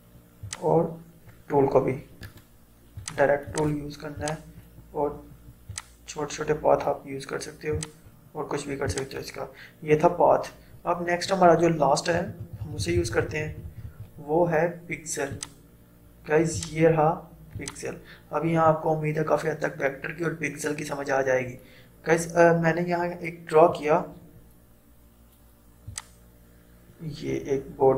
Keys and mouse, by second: 0.8-2.3 drag, 2.3 right click, 3.0-7.8 drag, 12.0 click, 12.2 ctrl+z, 15.4 click, 26.0-27.9 drag.